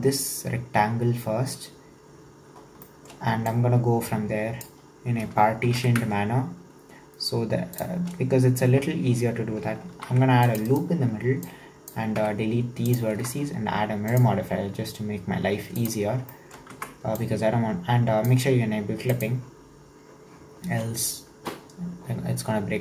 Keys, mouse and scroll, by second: 2.6 scroll down 2, 2.9 shift+middle click, 3.5 click, 4.9-5.7 scroll up 1, 5.7 g, 9.9 ctrl+r, 11.5 click, 12.2 x, 13.2 Tab, 15.9-16.3 drag, 16.3-16.8 shift+middle drag, 16.8 Tab, 17.2 click, 19.1 click.